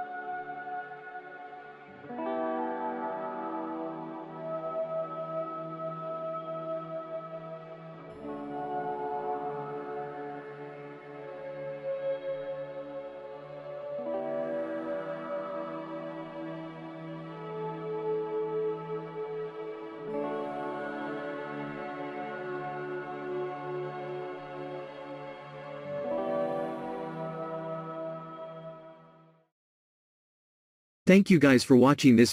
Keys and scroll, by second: 2.9 z, 5.9 Delete, 8.2 Escape, 8.7 ctrl+z, 8.9 ctrl+z, 20.0 ctrl+c, 20.2 ctrl+v, 21.2 Escape, 21.6 ctrl+r.